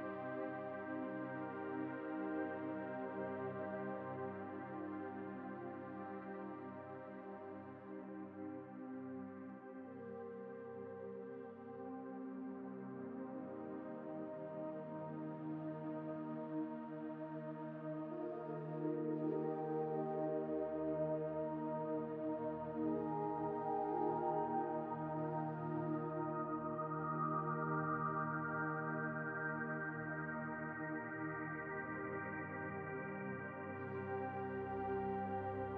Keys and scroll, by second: 14.7 z.